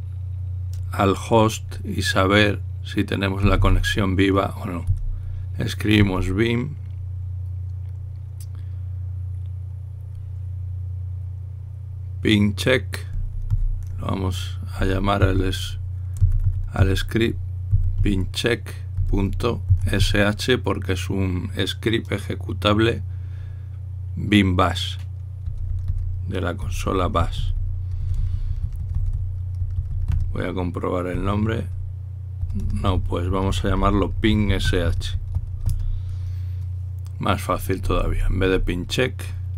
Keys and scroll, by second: 3.9-5.6 typing, 13.7-14.4 typing, 15.5-20.7 typing, 38.6 Left, 38.9 typing, 39.0 Left, 39.2 Left.